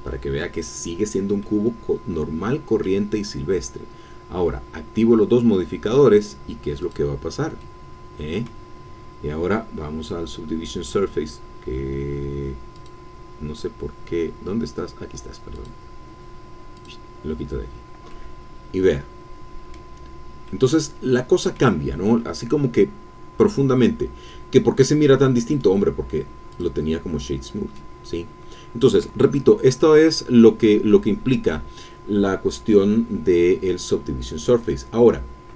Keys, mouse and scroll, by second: 1.4-3.0 drag, 6.8-8.6 drag, 12.7 click, 16.7 click, 18.1-20.0 drag, 20.0 scroll up 2, 20.1-20.7 scroll down 1, 20.7-21.7 drag, 24.0 scroll down 1, 24.3-25.3 drag, 26.5 click, 27.7 click, 28.0-29.0 middle drag, 29.0 scroll up 1, 29.3-30.0 scroll down 1, 30.0-30.6 scroll down 1, 30.6-32.0 middle drag.